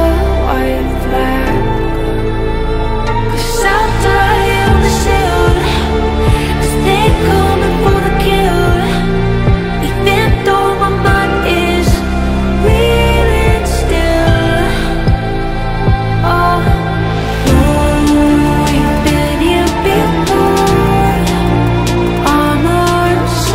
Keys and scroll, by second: 20.8 F3.